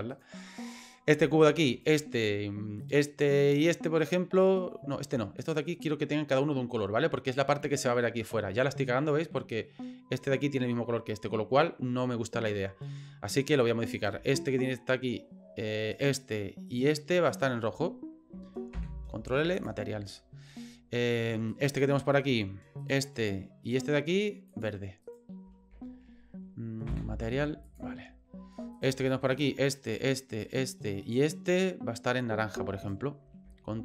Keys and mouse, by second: 0.1 right click, 0.8 right click, 1.7 shift+click, 2.8 shift+click, 3.5 shift+click, 5.4 right click, 13.9 right click, 15.9 shift+right click, 16.7 shift+right click, 17.3 shift+right click, 18.7 ctrl+l, 21.5 right click, 22.8 shift+right click, 23.7 shift+right click, 24.5 shift+click, 25.0 shift+right click, 26.8 ctrl+l, 28.8 right click, 29.3 right click, 29.9 shift+right click, 30.4 shift+right click, 31.0 shift+right click, 32.8 shift+right click.